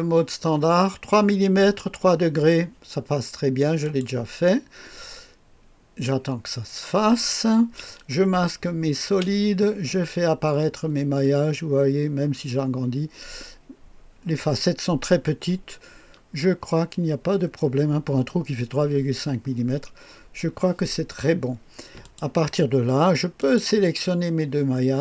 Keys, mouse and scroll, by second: 3.8 click, 9.1 space, 9.8-13.0 scroll up 1, 15.6-18.2 scroll down 3, 19.6-21.5 scroll down 3, 22.0 click, 23.4 click.